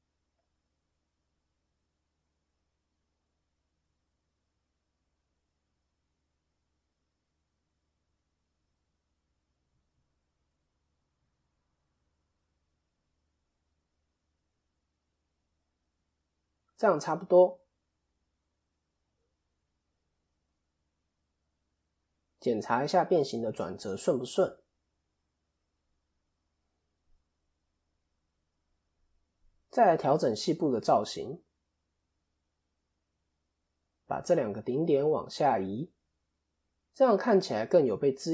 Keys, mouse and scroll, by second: 4.0 click, 5.8 r, 15.7-16.4 scroll down 2, 16.4-16.9 scroll down 1, 17.2 click, 17.2 scroll up 2, 17.9 KP_7, 18.9 KP_3, 19.6 KP_7, 21.1 click, 21.9 ctrl+KP_3, 24.9 KP_1, 28.9 KP_7, 30.7 click, 31.7 KP_1, 32.7 click, 36.4 KP_3.